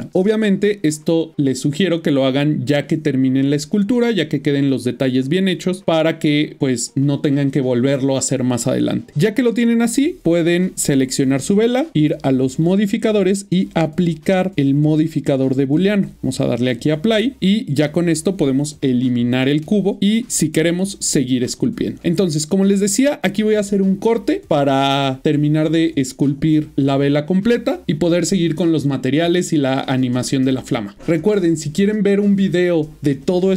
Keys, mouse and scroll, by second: 0.0 middle click, 3.2 middle click, 3.8 middle click, 4.2 shift+middle click, 5.8 middle click, 8.7 middle click, 9.6 middle click, 10.2 click, 17.4 middle click, 17.9 click, 18.6 middle click, 19.3 x, 19.6 click, 20.0 middle click.